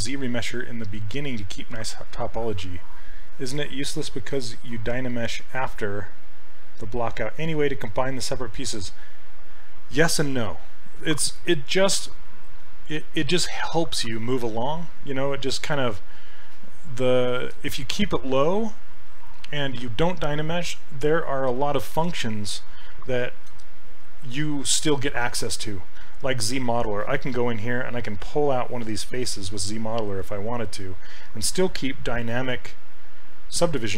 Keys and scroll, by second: 28.3 s.